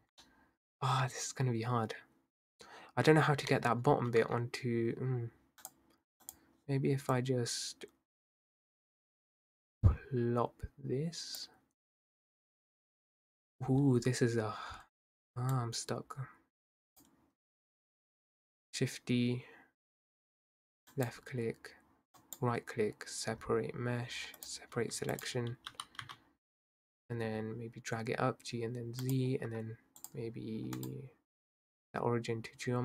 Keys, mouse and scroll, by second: 0.0 Tab, 0.2-0.9 middle drag, 0.9 Tab, 2.6-3.1 scroll down 1, 3.1-3.6 scroll up 2, 3.6 middle click, 3.9 Tab, 4.2 Tab, 5.6 drag, 6.3 click, 12.6-13.1 scroll down 2, 13.1 scroll up 4, 15.5 click, 17.9 shift+d, 22.3-24.8 right drag, 24.8 Tab, 25.1 click, 25.7 g, 30.0 click, 30.9-32.8 right drag.